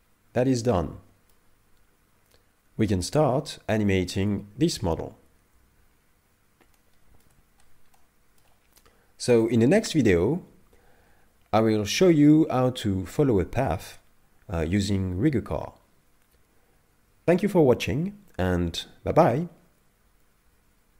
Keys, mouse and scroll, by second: 5.2 KP_5, 5.8-6.8 scroll down 6, 6.8 shift+middle click, 7.4-8.0 scroll down 2, 8.0 middle click, 8.8 scroll up 1.